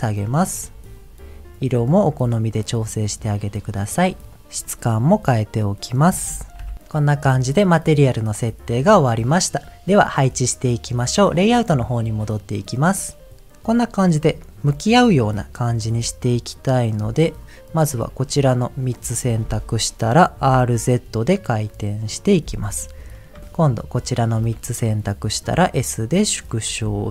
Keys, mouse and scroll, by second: 0.2 shift+middle click, 2.1 click, 2.6 click, 4.3 click, 4.6 middle click, 5.1 middle click, 5.9 click, 7.5 middle click, 12.3 click, 15.8 middle click, 16.5 click, 17.3 ctrl+click, 17.6 ctrl+click, 18.3 middle click, 20.5 r, 20.7 z, 22.1 click, 23.1 click, 23.6 shift+click, 24.0 shift+click, 26.5 click.